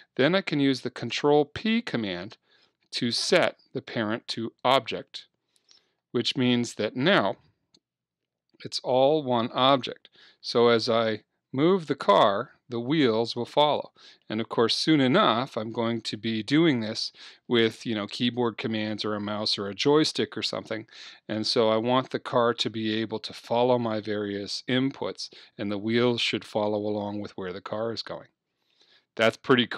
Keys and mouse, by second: 1.3 ctrl+p, 7.2 middle click, 11.1-13.0 right drag, 12.0-14.2 drag, 16.0-18.1 drag, 18.1-20.1 middle drag, 21.6-23.6 middle drag, 25.6-27.7 middle drag, 28.7-29.7 middle drag.